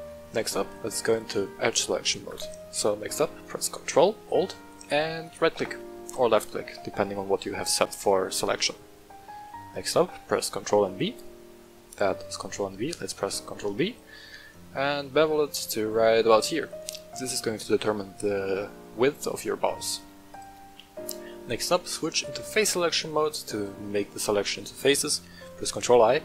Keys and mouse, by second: 1.1 click, 1.9-2.2 middle drag, 5.2 ctrl+alt+right click, 6.1 middle click, 8.1 middle click, 8.9 click, 8.9 right click, 10.5 ctrl+v, 13.0 ctrl+b, 16.2 shift+click, 20.3 click, 23.1-23.6 middle drag, 24.6 middle click, 25.8 ctrl+i.